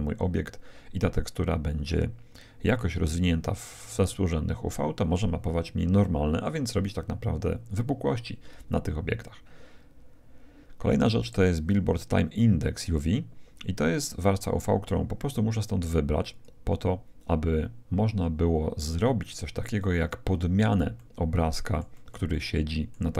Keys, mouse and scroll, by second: 13.9-15.8 drag, 20.2-23.1 middle drag.